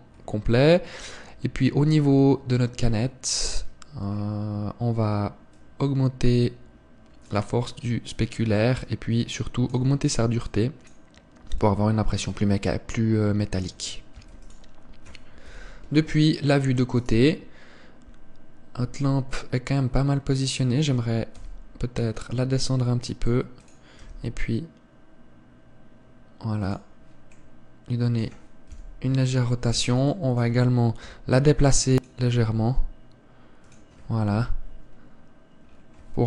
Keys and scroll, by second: 14.8 ctrl+s, 16.2 KP_3, 22.0 g, 24.7 r, 29.4 KP_7, 31.8 g, 33.1 r, 35.1 KP_3.